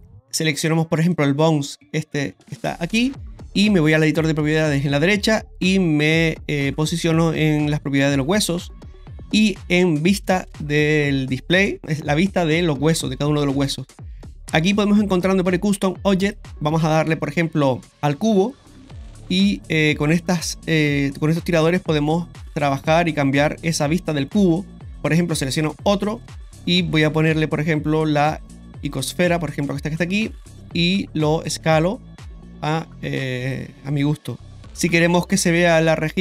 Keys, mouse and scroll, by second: 1.1 right click, 8.2 click, 10.5 click, 16.3-18.2 drag, 20.7-23.9 drag, 25.7 right click, 27.2 click, 30.6-33.5 drag.